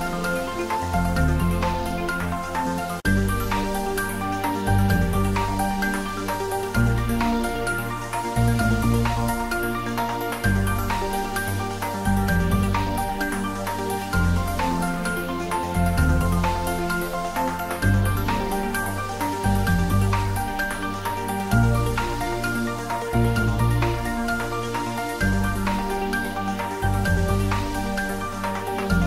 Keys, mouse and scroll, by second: 0.4 2, 0.6 click, 1.1 g, 2.9 click, 3.4 s, 4.7 click, 5.0 g, 6.7 click, 6.8 Tab, 7.2 shift+z, 7.5 ctrl+middle click, 7.8 middle click, 9.9 shift+click, 10.1-12.2 typing, 11.2 click, 12.5 click, 12.8 ctrl+s, 13.8 click, 15.0-16.7 middle drag, 16.7 click, 17.3 r, 19.2 click, 19.9-22.1 middle drag, 22.1-23.4 middle drag, 23.2-24.1 typing, 24.9 click, 25.3 s, 26.1 click, 27.4-29.0 typing, 28.4 click.